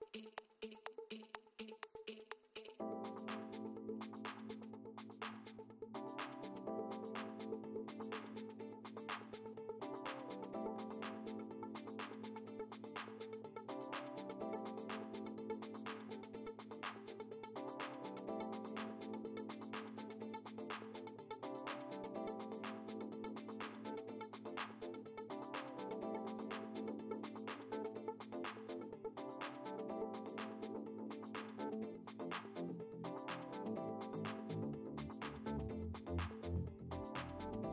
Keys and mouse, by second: 29.7 ctrl+space, 30.9 ctrl+space, 31.3 ctrl+click, 31.9 space, 36.3 click, 37.5 alt+BackSpace.